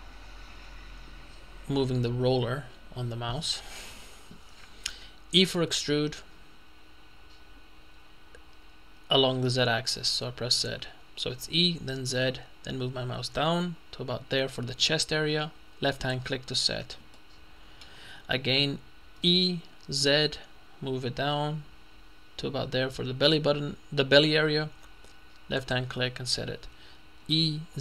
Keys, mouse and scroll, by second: 1.5-2.1 scroll down 2, 2.1-2.5 scroll up 2, 2.5-3.4 scroll down 2, 5.5 e, 9.6 z, 16.0 click, 17.2-18.3 shift+middle drag, 19.3 e, 20.1 z, 25.6 click, 27.5 e.